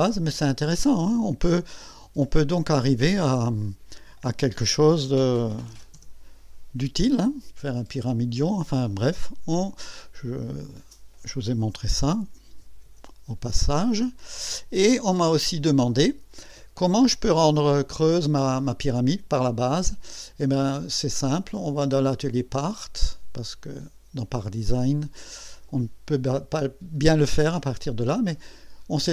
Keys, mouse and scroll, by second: 3.6 click, 5.5 KP_8, 5.7 KP_0, 5.9 KP_Enter, 7.2-8.9 drag, 10.6 click, 12.6 KP_2, 12.8 KP_0, 13.9 KP_Enter, 14.9-15.6 drag, 16.1 scroll up 1, 16.6 scroll down 1, 17.3-18.0 drag, 19.1-19.8 drag, 20.6 click, 22.1 click, 24.1 click.